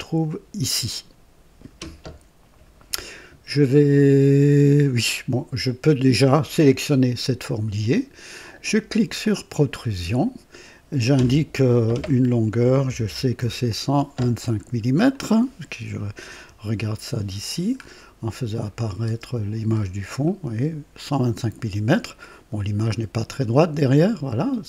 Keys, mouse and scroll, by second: 6.7 click, 9.1 click, 12.6 KP_1, 12.8 KP_2, 13.0 KP_5, 13.3 Return, 14.4-14.8 scroll down 1, 15.1 click, 16.3 KP_2, 17.7-18.0 scroll up 1, 18.6 click, 19.0 space, 19.8 scroll down 1, 20.2-22.2 right drag.